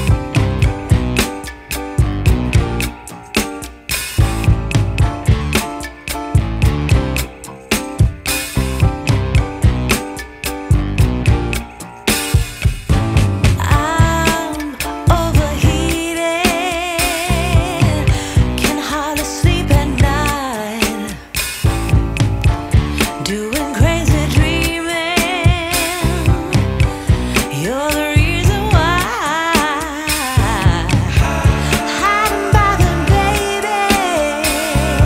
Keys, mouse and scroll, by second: 0.3 shift+a, 3.9 shift+a, 7.1 z, 9.8 ctrl+s, 10.2 scroll up 5, 11.8-13.5 drag, 15.5-17.8 drag, 17.8-19.3 middle drag, 19.3 shift+a, 22.0-23.3 drag, 24.4 ctrl+t, 25.4-31.0 drag.